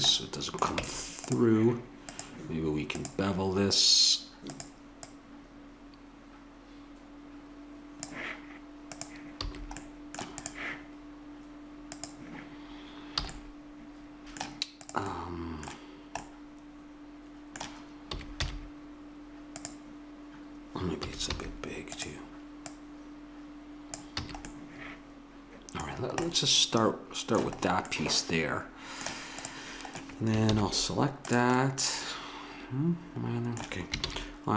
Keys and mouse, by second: 0.1 middle click, 0.8 Tab, 2.0-3.8 drag, 4.5-6.9 drag, 8.9 click, 9.4 a, 9.8-12.6 middle drag, 12.6-13.3 drag, 13.2 a, 13.3-13.6 middle drag, 14.8-15.2 drag, 15.2 middle click, 15.2-16.5 drag, 16.9 middle click, 17.2 middle click, 18.0 s, 21.0 s, 24.2 a, 27.7-29.4 middle drag, 29.4-31.2 drag, 30.4 shift+s, 31.5 drag, 34.0 shift+a.